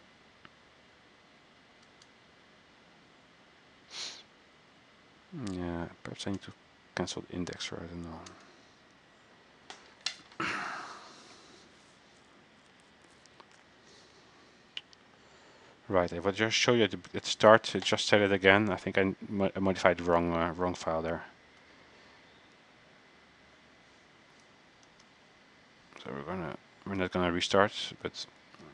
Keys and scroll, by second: 25.0 alt+F4, 26.0 alt+Tab, 28.1 alt+Tab, 28.6 alt+Tab.